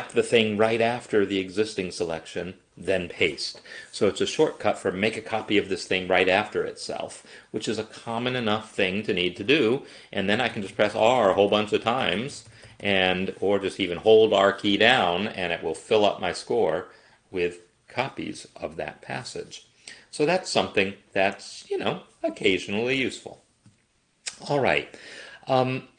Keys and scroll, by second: 9.5-11.4 r, 11.8 r.